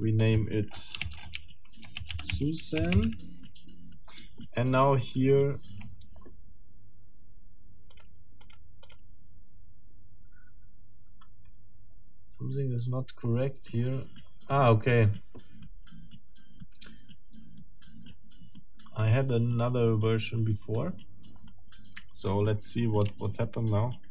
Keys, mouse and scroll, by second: 1.0 ctrl+a, 2.0 ctrl+shift+s, 2.1 ctrl+shift+u, 2.3 ctrl+shift+z, 2.6 ctrl+shift+a, 2.8 ctrl+shift+n, 3.0 ctrl+shift+e, 7.9 click, 8.4 click, 8.8 click, 19.5 click.